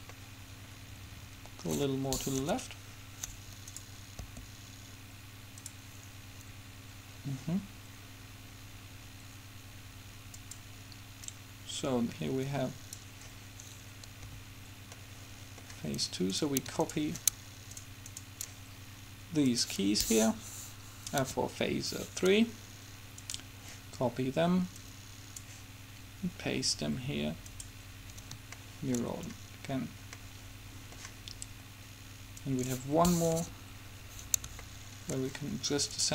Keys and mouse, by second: 0.3-1.6 middle drag, 2.7 KP_7, 3.9 right click, 4.4 r, 4.8 right click, 10.6-13.4 drag, 14.4 a, 15.1-17.6 middle drag, 21.4 KP_7, 24.6-26.6 drag, 27.7-28.8 drag, 28.8 middle click, 32.6-33.6 drag, 33.6 KP_7, 34.2 click, 35.0-36.1 middle drag.